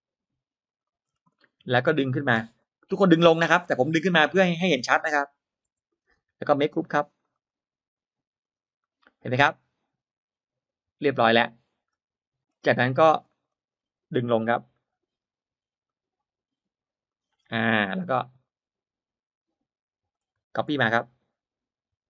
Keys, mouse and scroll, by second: 0.5 click, 0.9 scroll down 1, 1.0 space, 1.3 middle click, 2.5 click, 2.5 p, 4.7 1, 5.6 Return, 5.6 1, 5.9 space, 6.5 click, 6.8 click, 7.3-7.9 right drag, 8.3 click, 8.7-11.5 middle drag, 11.5-11.9 scroll down 1, 11.7 middle click, 12.5-12.9 scroll up 1, 13.1 middle click, 13.3-13.7 scroll down 1, 14.6 middle click, 15.3 m, 15.7 click, 16.9 click, 17.2-18.1 scroll down 2, 17.5 middle click, 18.2 scroll up 1, 20.0 click.